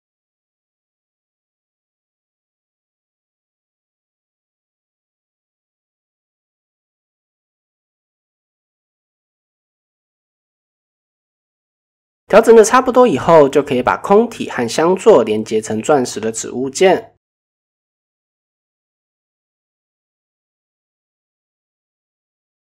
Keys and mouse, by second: 0.0 click, 0.8 Tab, 1.3 middle click, 2.2 click, 2.4-3.3 middle drag, 3.7-6.6 typing, 7.7-8.1 shift+middle drag, 8.5 shift+middle click, 9.2 middle click, 10.6 click, 12.4 shift+click, 13.5 ctrl+p, 14.8-15.6 middle drag, 16.3-16.6 middle drag, 16.9 KP_1, 17.8 shift+middle click, 18.3-18.7 shift+middle drag, 19.4 KP_7, 20.9 middle drag.